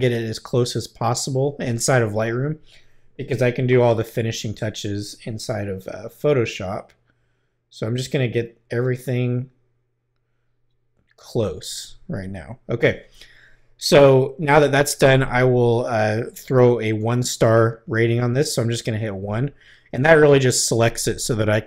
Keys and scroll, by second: 19.2 |.